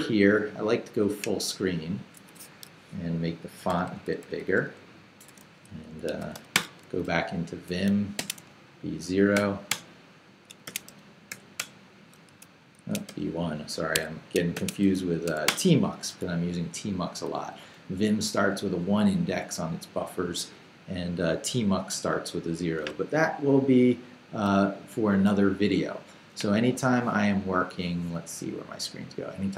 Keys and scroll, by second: 3.7 super+=, 5.8-6.8 typing, 8.2 shift+;, 8.4 shift+b, 9.3 0, 9.7 Return, 10.4-13.1 typing, 12.4 shift+Return, 13.9 Escape, 14.3-15.8 typing, 17.0 j.